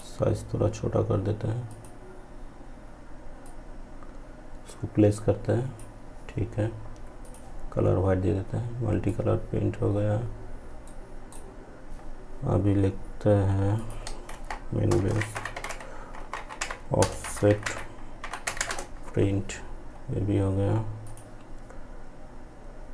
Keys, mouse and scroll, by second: 9.9-12.8 ctrl+right drag, 12.8 click, 13.3 ctrl+a, 16.5 p, 20.1 click.